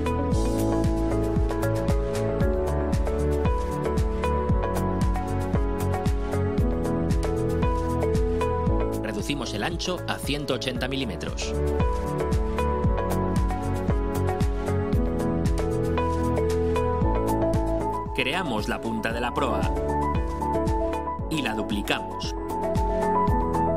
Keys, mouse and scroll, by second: 0.2 Return, 1.5-5.6 drag, 6.1 click, 10.1 click, 11.2-12.7 typing, 12.9 Return, 17.4 click, 20.1 click, 22.3 click, 23.4 click.